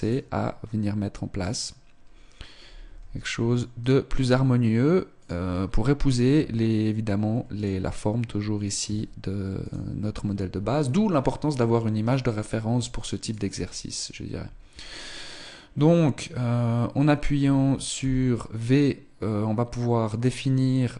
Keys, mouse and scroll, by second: 1.4 right click, 2.9 r, 7.6 right click, 8.8 s, 11.9 right click, 13.2 right click, 14.8 right click, 18.0 v.